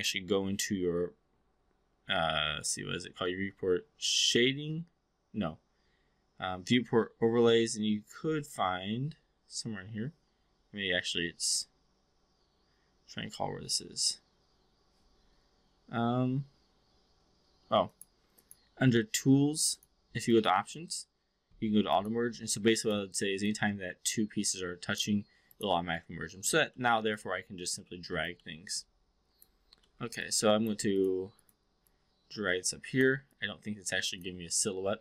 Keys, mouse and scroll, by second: 0.0-16.4 drag, 17.8 click, 18.2 click, 20.3 click, 21.9 click, 22.7 click, 23.4-25.0 drag, 25.5 click, 26.0-26.5 alt+drag, 26.7 alt+middle click, 27.1-28.3 alt+drag, 28.4 alt+middle click, 28.8-29.5 alt+drag, 29.8 alt+middle drag, 30.2-30.7 alt+drag, 30.9 click, 31.8-33.0 drag, 33.3-34.3 alt+drag.